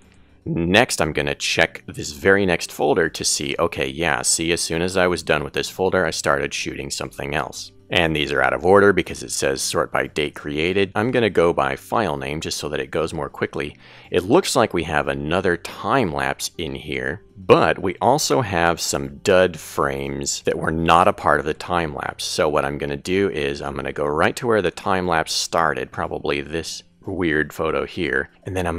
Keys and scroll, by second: 20.7 Right.